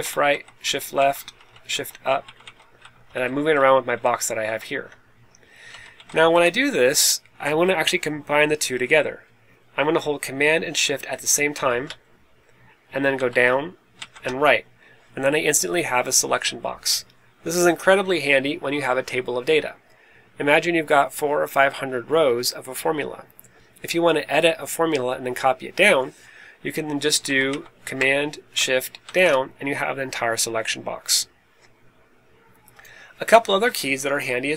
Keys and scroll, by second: 5.6 Up, 5.8 Right, 6.0 Down, 6.2 Left, 13.1 shift+super+Down, 13.9 shift+super+Right, 27.2 Left, 27.4 Right, 29.0 shift+super+Down.